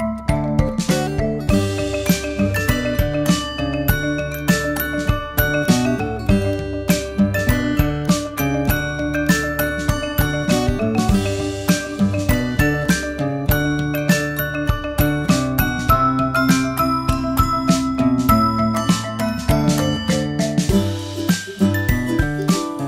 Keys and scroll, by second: 12.4 super+0.